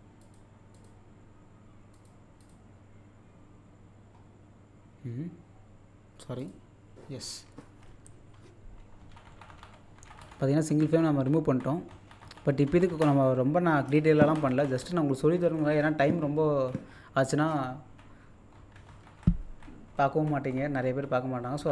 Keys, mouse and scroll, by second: 1.9 click, 4.1-5.2 scroll up 1, 6.4 click, 7.2-8.0 scroll up 1, 9.9-11.5 scroll up 1, 12.5-14.1 scroll down 1, 14.9-15.7 scroll up 1, 21.2-21.7 scroll up 1.